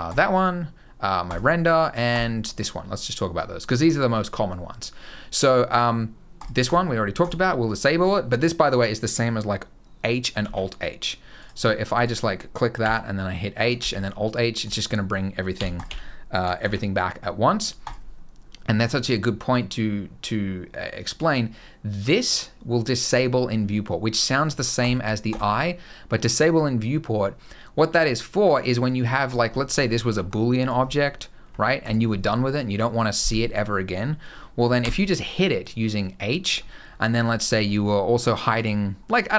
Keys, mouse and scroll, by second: 6.1 click, 6.4 click, 6.9 click, 10.1 alt+h, 11.1 click, 11.7 click, 12.5 h, 13.5 alt+h, 14.4 click, 15.3 h, 15.5 click, 15.6 h, 16.3 alt+h, 17.6 click, 24.5 click, 25.0 click, 29.0 click, 29.2-29.5 scroll up 3, 29.5 middle click, 29.7 scroll down 1, 29.8 g, 30.6 middle click, 30.8-31.2 scroll up 2, 31.2 g, 34.5 h, 36.4-36.9 scroll down 5, 36.9-37.4 scroll up 3, 37.4 middle click, 37.6-38.3 scroll down 2, 38.3 click, 39.1 middle click.